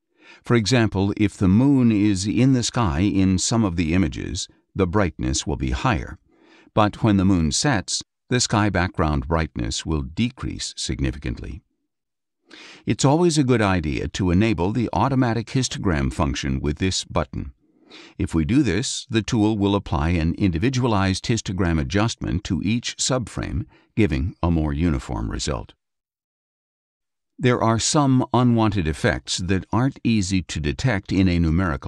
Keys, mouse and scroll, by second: 14.0 click, 18.4 click, 22.5 click, 24.3 Down.